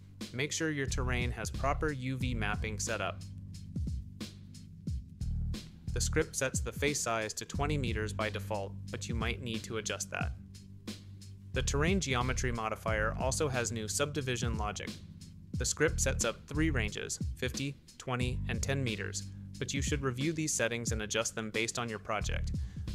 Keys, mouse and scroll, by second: 0.5 Tab, 1.0 Tab, 2.0-2.5 drag, 3.1 Tab, 3.3-4.4 typing, 4.5 click, 4.7 Tab, 6.0 click, 7.0 click, 7.7 click, 8.7 click, 10.0 click, 11.0-11.3 middle drag, 11.7 KP_Divide, 12.5 click, 15.2 click, 16.7 click, 22.5 click.